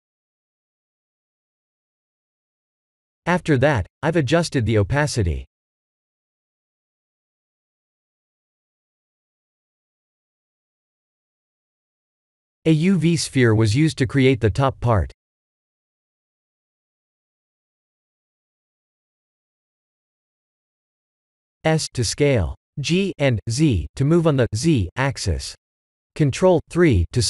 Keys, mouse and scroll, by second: 0.3 click, 2.1 click, 2.9 click, 3.4 click, 3.8 click, 4.2 click, 4.6 click, 9.1 click, 10.6 click, 11.0 click, 12.0 click, 13.1 click, 14.0 click, 15.5 shift+a, 20.1 s, 21.2 s, 23.0 ctrl+z, 23.5 g.